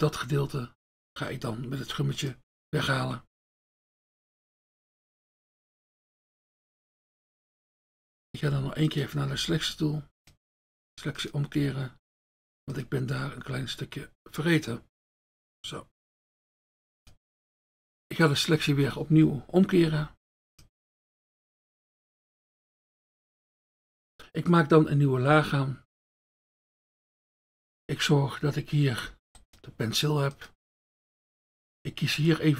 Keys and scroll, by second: 8.7 F1, 17.8 Return, 26.4 F1, 30.7 F1.